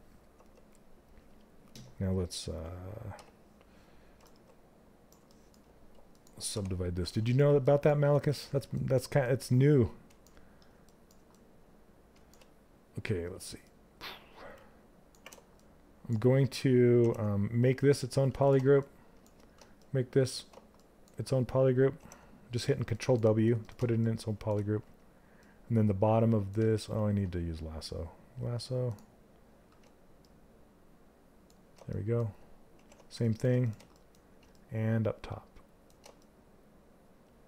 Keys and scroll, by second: 6.0 q, 14.2 ctrl+shift+space, 16.5 ctrl+w, 26.4 ctrl+z.